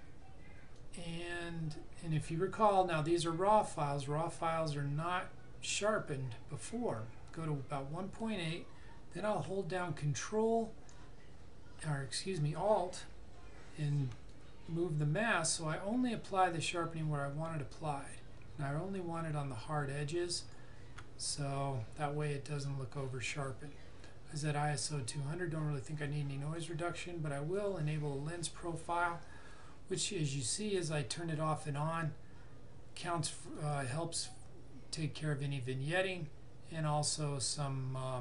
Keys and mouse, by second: 0.8 click, 14.3 alt+click, 26.6 click, 30.8 click.